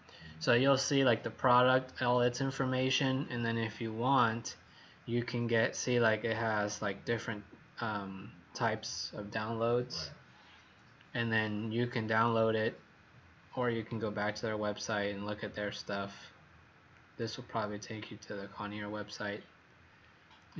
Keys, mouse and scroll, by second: 3.6-4.1 scroll down 4, 10.1-10.5 scroll up 5, 14.2 scroll down 1, 15.4 scroll up 3, 16.9 click, 19.9 scroll down 1.